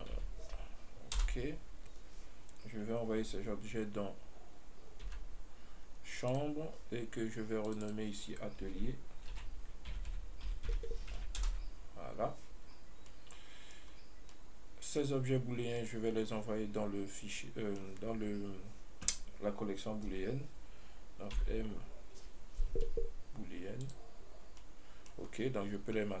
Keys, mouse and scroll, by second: 5.3 m, 7.9 click, 8.1-11.1 drag, 13.0-13.4 scroll down 1, 13.4-14.1 middle drag, 14.1 scroll up 1, 14.6-16.0 middle drag, 16.0 right click, 17.6-20.6 middle drag, 21.6 m, 24.9-25.5 middle drag.